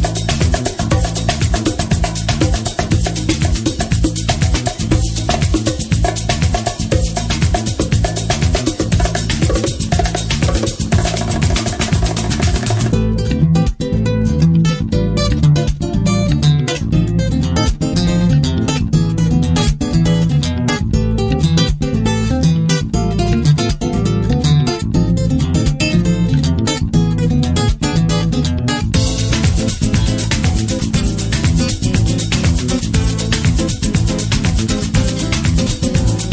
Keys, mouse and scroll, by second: 1.2-4.1 middle drag, 4.2 middle click, 5.1-6.3 middle drag, 6.4-8.9 middle drag, 13.2-18.6 drag, 15.6 KP_3, 18.6-22.6 middle drag, 23.3 middle click, 24.2-27.2 middle drag, 32.0-33.9 drag, 33.9 middle click.